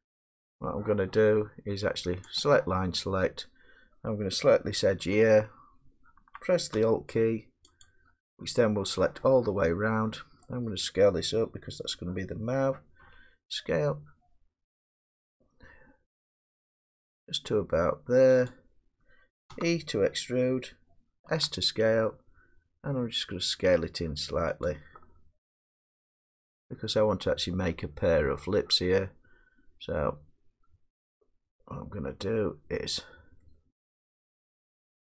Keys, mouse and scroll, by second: 0.4 middle click, 0.6 middle click, 2.3 click, 3.0 middle click, 3.1 middle click, 7.8 scroll, 7.8 alt+click, 9.6-10.1 scroll, 10.4-11.0 scroll, 13.0 s, 18.5 click, 19.5 e, 21.3 s, 24.6 click, 25.6 middle click, 27.4 middle click, 28.1 middle click, 28.3-29.6 scroll down 1, 33.4 middle click, 34.8 middle click.